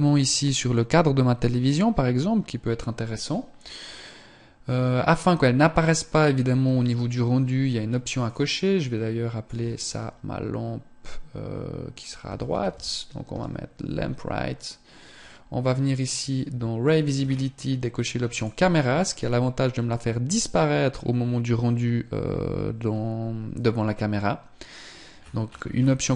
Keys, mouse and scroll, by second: 7.8 click, 14.4 click, 16.7 scroll down 2, 17.9 click, 17.9 scroll down 6, 24.7 scroll up 1.